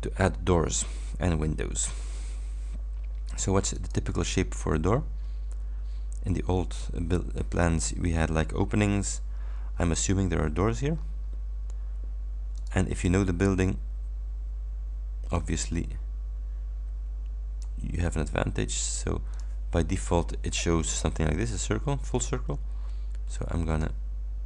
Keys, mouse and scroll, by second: 0.2 scroll up 2, 1.4 scroll up 2, 3.8 click, 4.9-5.5 scroll down 4, 9.5-10.1 ctrl+scroll up 2, 10.3 ctrl+scroll up 2, 11.1 ctrl+scroll down 3, 12.7 ctrl+click, 15.4-17.9 ctrl+shift+drag, 19.4 click, 22.2-24.1 drag.